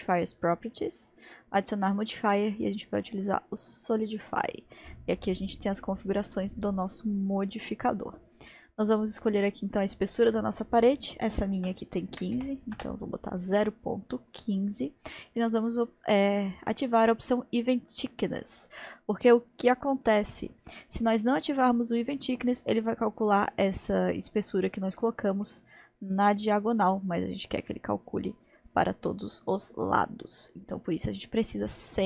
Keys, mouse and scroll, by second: 1.6-4.6 drag, 9.3-12.4 drag, 18.0 click, 19.6-22.6 drag, 25.1-32.0 drag.